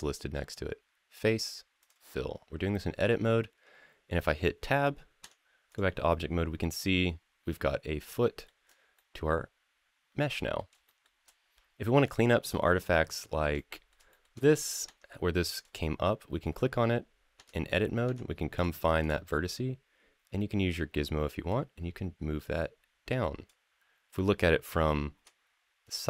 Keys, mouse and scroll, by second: 2.5-3.9 middle drag, 5.0 Tab, 5.5 click, 5.9-8.3 middle drag, 8.4 click, 8.7-10.3 middle drag, 10.6 shift+middle drag, 11.2-11.6 scroll up 4, 12.1 shift+middle click, 12.6 shift+middle click, 12.9 shift+middle drag, 13.3 middle click, 13.9 shift+middle click, 14.2 click, 14.7 Tab, 15.3 click, 17.2 Tab, 17.8 Tab, 18.3 click, 18.8 click, 21.3-23.3 drag, 25.6-26.0 scroll up 9.